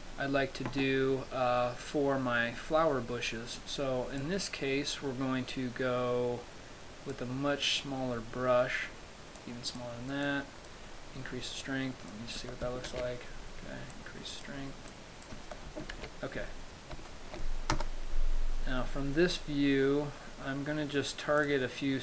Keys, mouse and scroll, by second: 0.2 shift+middle click, 4.4 click, 7.3 click, 9.6 click, 10.5 click, 11.8 click, 13.1 ctrl+z, 14.2 click, 15.1 click, 16.2 ctrl+z, 16.9-17.3 scroll up 2, 17.3 shift+middle click, 18.0 KP_0, 20.0 scroll up 1, 21.7 click.